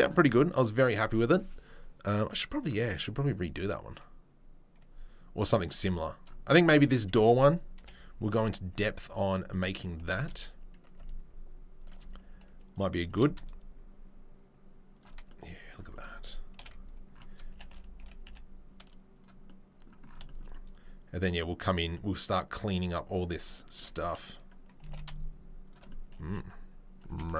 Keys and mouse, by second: 3.9-5.7 right drag, 5.7-27.3 middle drag, 7.7 KP_7, 8.7 g, 9.9 g, 12.0 s, 13.1 g, 16.5 KP_7, 17.5 g, 24.8 g, 27.1 g.